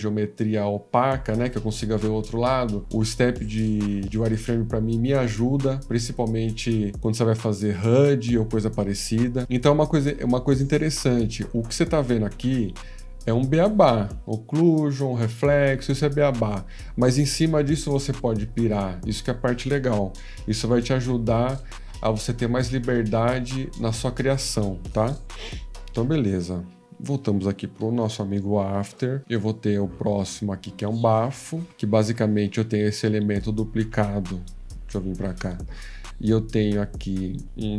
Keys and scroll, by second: 25.1 F18, 26.7 F13, 34.8 F14.